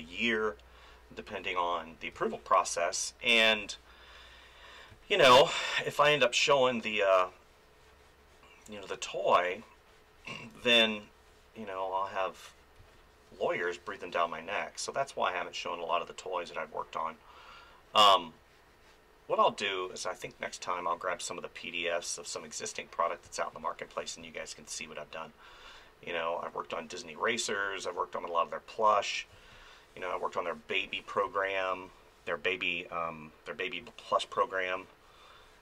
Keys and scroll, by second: 2.1 space, 4.9 space, 10.6 space, 12.8 space, 20.2 space, 23.2 space, 27.5 space, 29.3 space, 31.2 space.